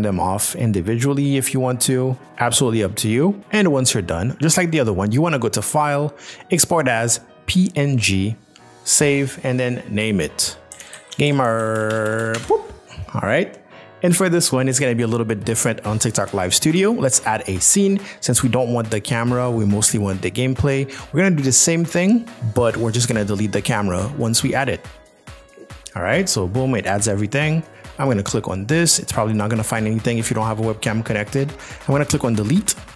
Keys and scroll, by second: 10.7-11.3 typing, 12.4 Return.